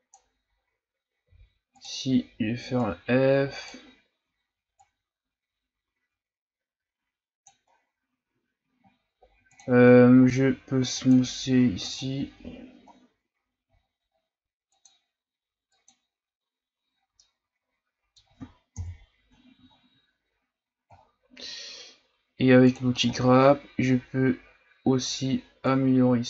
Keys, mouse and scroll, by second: 1.2 f, 2.8-7.7 drag, 7.7-9.5 scroll down 2, 9.5 click, 9.9 ctrl+scroll down 1, 10.2-11.0 scroll up 4, 11.0-12.9 drag, 12.9-13.7 scroll down 2, 13.7-14.7 shift+scroll up 5, 14.7-17.0 drag, 17.0 scroll down 3, 17.2-18.7 middle drag, 18.7 KP_1, 19.7-20.9 shift+scroll down 3, 20.9 shift+scroll down 6, 21.4 scroll up 1, 22.7 click, 23.0 ctrl+scroll up 4, 23.8-24.8 scroll up 2, 25.7-26.2 drag.